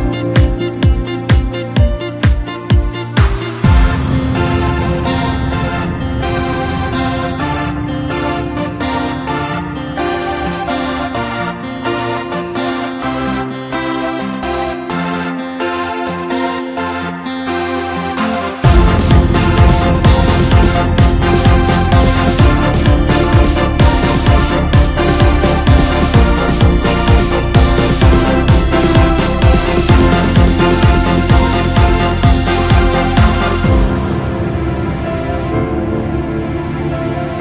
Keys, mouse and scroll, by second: 2.1 click, 3.4-6.4 middle drag, 6.6 click, 7.3-7.8 scroll up 1, 8.3 KP_1, 11.9 click, 13.4-14.7 drag, 14.7-15.2 scroll up 1, 16.1 r, 22.7 ctrl+KP_2, 23.0-23.4 ctrl+KP_2, 24.9-26.5 drag, 26.5-27.5 scroll up 2, 27.5 click, 28.1-29.0 scroll up 2, 29.0-29.6 scroll down 1, 29.6-31.0 scroll up 2, 31.0 k.